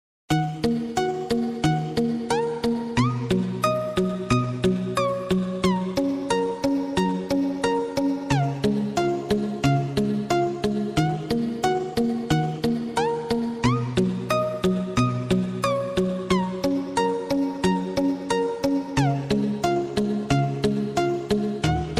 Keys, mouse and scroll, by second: 0.7 click, 1.2-1.8 scroll up 1, 1.8 Tab, 2.3 click, 3.5-4.3 scroll down 1, 4.3 click, 4.9 Tab, 5.6 click, 6.9 click, 7.5 click, 7.9 Tab, 8.4 click, 9.4 KP_7, 10.9-11.9 drag, 11.9-13.1 scroll up 1, 17.3 click, 19.7 e, 20.9 KP_1.